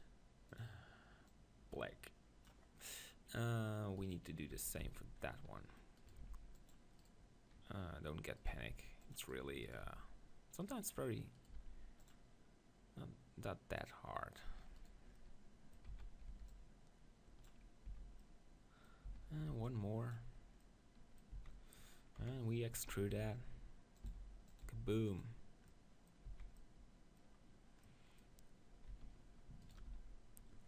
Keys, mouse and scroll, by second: 3.0-4.0 middle drag, 4.0-5.7 right drag, 4.6 Tab, 4.8 z, 6.2 ctrl+r, 8.6 ctrl+r, 9.8 ctrl+r, 11.6 ctrl+r, 13.8-16.6 drag, 14.8-16.6 right drag, 15.9 z, 16.3 b, 16.6 middle click, 17.9 z, 18.2-19.5 middle drag, 19.1 z, 19.5 b, 21.3 z, 22.2 KP_7, 22.9 z, 23.1 e, 24.2 s, 24.6-27.0 drag, 24.7 g, 26.3 z, 27.0 middle click, 28.9 z, 29.6 right click, 29.9 z.